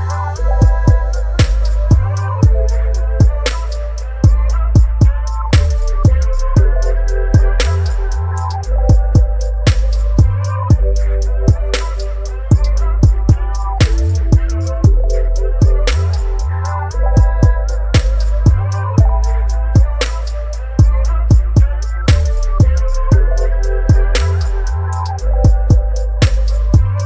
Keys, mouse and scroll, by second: 6.9 Delete, 8.1 right click, 10.0-21.8 drag, 21.8 click, 22.8-25.0 drag.